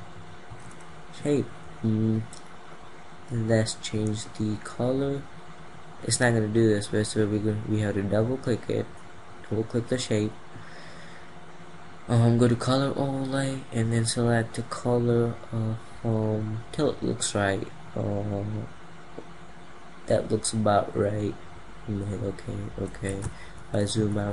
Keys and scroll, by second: 23.5 ctrl+0.